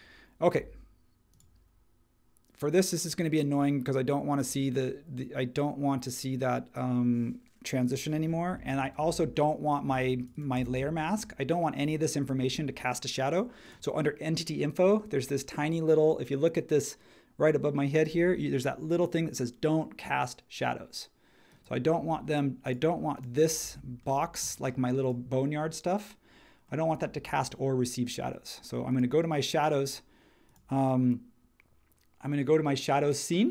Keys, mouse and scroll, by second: 9.0 space.